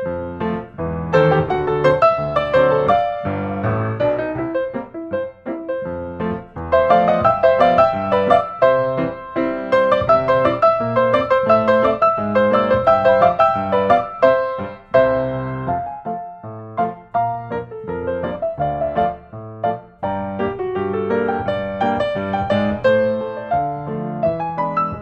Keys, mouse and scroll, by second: 0.5 typing, 1.3 Return, 4.0 click, 4.8 click, 6.6-7.8 drag, 7.8-8.8 drag, 9.0-9.6 typing, 10.7 Return, 12.0-12.3 scroll down 8, 12.5-12.8 scroll, 13.1-13.9 scroll, 14.9 click, 16.5-17.5 drag, 19.7-20.8 drag, 22.2-23.4 typing.